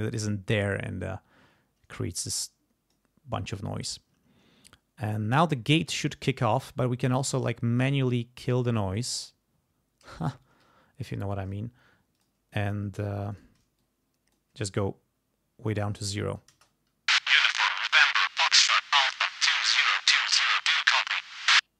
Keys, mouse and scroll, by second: 8.7 click, 12.1 click, 13.3 shift+right click, 13.8 shift+click, 16.2 click, 16.5 space.